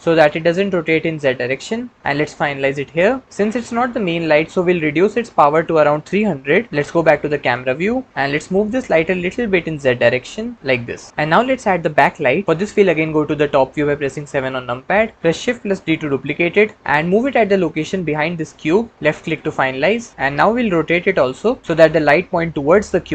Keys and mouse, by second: 2.3 click, 5.5-6.7 drag, 6.7 KP_0, 7.2 KP_0, 8.1 g, 8.7 z, 14.3 KP_7, 15.1 shift+d, 19.0 click, 20.1 g.